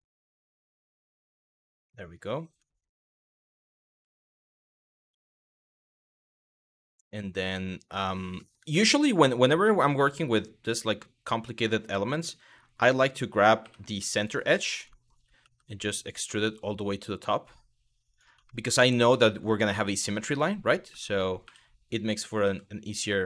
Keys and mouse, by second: 1.2 middle click, 2.3 middle click, 3.1 Tab, 3.6 1, 4.7 Tab, 5.3 1, 6.0 click, 6.4 shift+middle click, 8.1 middle click, 12.4 click, 13.2 2, 14.6 shift+middle click, 15.0 w, 15.9 e, 17.7 click, 18.1 shift+middle click, 18.7 shift+middle click, 19.9 Tab, 20.5 Tab, 21.1 1, 22.0 w, 22.5 click.